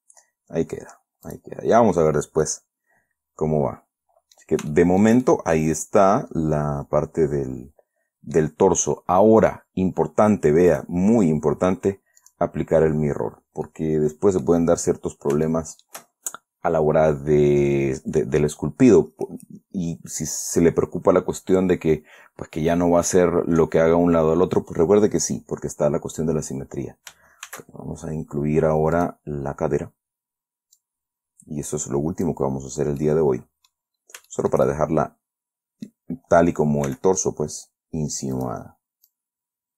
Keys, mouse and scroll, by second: 1.6 click, 2.2-2.6 scroll down 4, 2.8-4.9 middle drag, 5.1-8.9 shift+middle drag, 8.9-11.1 scroll up 2, 11.1 middle click, 12.6 click, 13.7 scroll down 1, 14.0 middle click, 15.2-15.5 scroll up 2, 15.8 shift+middle click, 27.8 shift+a, 29.3 click, 29.7-30.3 scroll down 4, 31.1-32.8 drag, 33.4 middle click, 34.6-36.4 shift+middle drag, 37.2 s, 38.7 click, 39.4-39.7 drag.